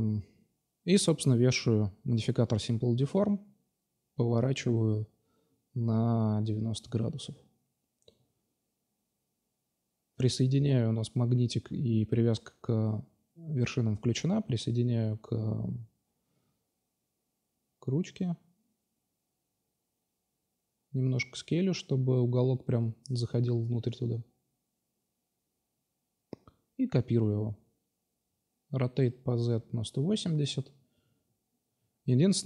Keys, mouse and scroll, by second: 0.5 drag, 1.9 Tab, 3.2 a, 3.3 a, 3.8 s, 7.0 Tab, 8.4-9.4 middle drag, 9.7-12.0 middle drag, 12.0 r, 14.1 middle drag, 16.3 s, 18.1 Tab, 19.1 l, 19.5 s, 20.8-22.0 drag, 21.2 Tab, 22.0 h, 23.9 g, 25.3 shift+d, 25.9 r, 27.2-28.6 drag, 28.6 g, 31.5-32.4 drag, 31.5 g.